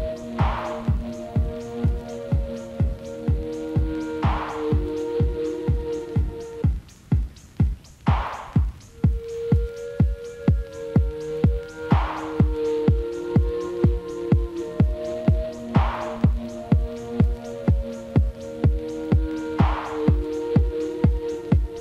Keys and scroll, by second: 12.4 ctrl+s.